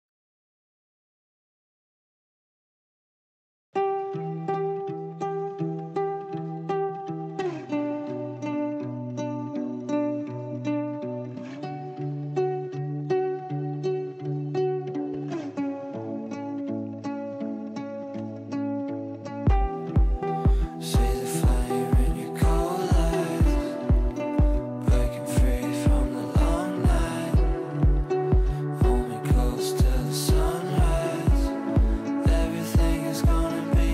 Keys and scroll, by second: 12.9 shift+F2, 13.4 F3.